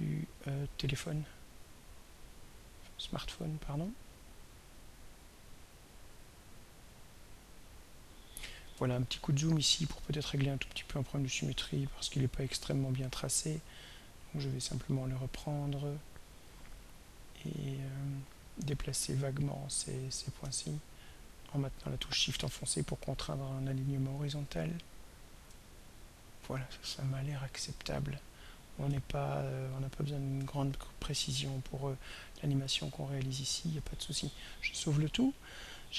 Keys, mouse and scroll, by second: 1.9-7.1 drag, 9.1-9.5 ctrl+scroll up 2, 10.1-10.5 ctrl+scroll up 2, 10.9-11.4 ctrl+scroll up 3, 14.2 click, 17.3-18.4 drag, 19.7-25.1 drag, 27.3-28.2 scroll down 2, 29.0 ctrl+scroll down 2, 30.0-30.5 ctrl+scroll up 4, 30.6 ctrl+scroll down 2, 31.3-31.9 ctrl+scroll up 5, 33.4 click, 35.5 ctrl+s.